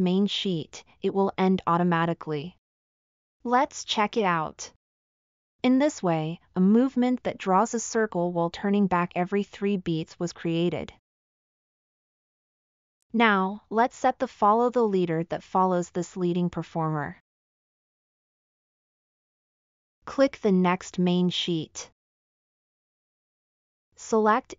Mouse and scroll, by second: 7.6 click, 9.7-10.4 middle drag.